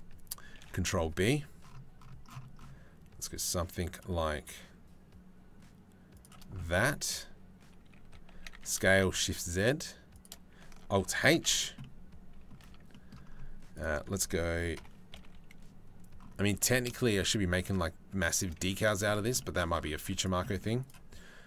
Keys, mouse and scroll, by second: 0.2 ctrl+b, 7.9 a, 8.2 s, 10.7 alt+h, 11.1 Tab, 11.1 click, 11.4 click, 12.3 Tab, 12.5 click, 14.4 ctrl+l, 14.9 KP_3, 16.2 g, 18.2 z, 18.9 Tab, 19.8 click, 20.1 click.